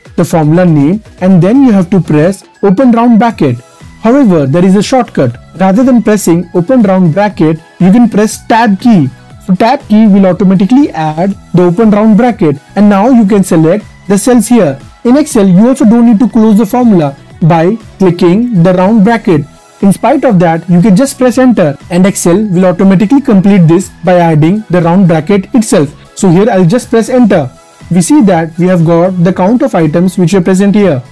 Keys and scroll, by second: 7.6 Tab, 23.7 Return.